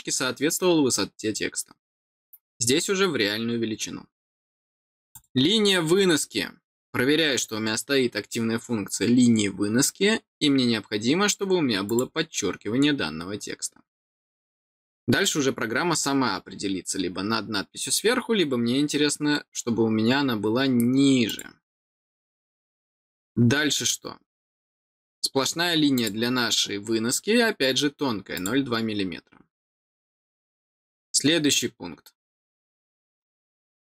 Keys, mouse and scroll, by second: 5.0 click, 11.8 click, 21.2 click, 25.9 click, 28.3 click.